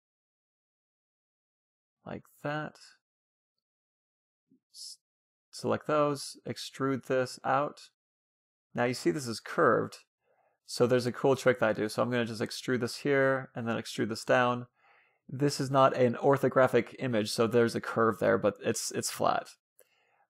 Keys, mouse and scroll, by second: 0.3-1.9 middle drag, 0.7 e, 2.9-4.5 middle drag, 3.5 a, 3.7 c, 4.5-6.0 right drag, 5.1 e, 8.8-11.2 middle drag, 10.2-11.2 scroll up 1, 10.3 e, 12.3 a, 12.6 c, 13.4-14.9 right drag, 13.4 e.